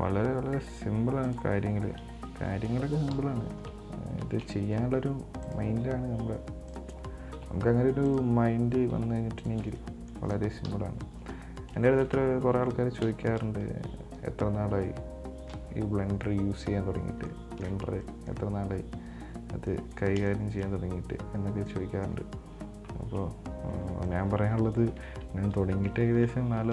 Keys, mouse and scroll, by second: 0.8 r, 2.0-3.4 middle drag, 3.4 KP_7, 4.5 shift+d, 6.0 r, 7.5 g, 9.2 r, 10.0 middle click, 10.9 KP_1, 11.5-12.1 scroll up 6, 12.1-13.8 shift+middle drag, 13.8 z, 17.5-18.2 middle drag, 18.2 scroll up 1, 18.3-19.5 middle drag, 19.5 scroll up 3, 20.0-21.6 middle drag, 21.6-22.0 scroll down 3, 22.0 middle click, 22.8 z, 24.0 scroll down 2, 24.2-26.7 middle drag.